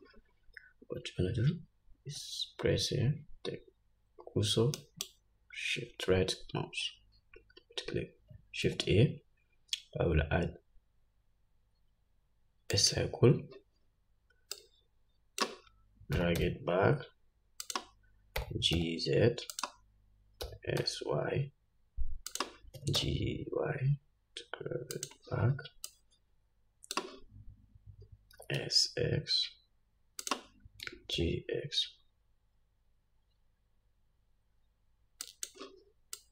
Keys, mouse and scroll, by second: 0.0-18.2 drag, 5.2 shift+right click, 9.0 shift+a, 16.5 g, 18.8 g, 20.8 s, 23.2 g, 26.2-30.7 drag, 28.8 s, 31.2 g.